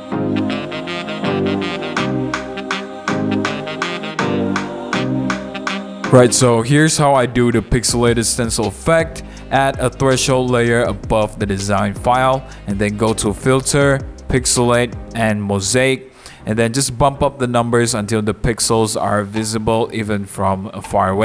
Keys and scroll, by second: 0.0 super+t, 0.3 Return, 0.4 super+a, 0.6 super+d, 0.7 super+0, 0.7 super+-, 1.1 super+a, 1.2 super+d, 1.3 super+g, 1.5-2.7 typing, 2.8 super+t, 3.2 Return, 3.3 super+a, 3.5 super+d, 3.6 super+t, 3.9 Return, 4.0 super+a, 4.2 super+d, 18.8 super+=.